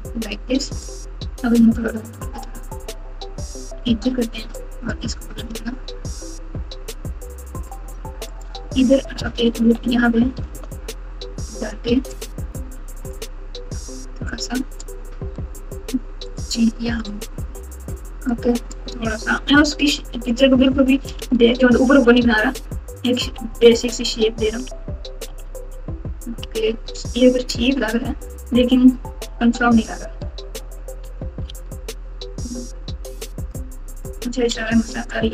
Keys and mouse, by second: 0.9 click, 1.9 g, 4.7 click, 5.5 g, 9.5 ctrl+r, 12.3 click, 14.4 click, 15.5 g, 18.4 click, 19.3 g, 21.1 alt+z, 22.3 Tab, 23.7-26.7 typing, 28.5 KP_1, 29.2 KP_7, 30.2 Tab, 31.4 alt+z, 33.5 click, 33.7 click, 34.5 g.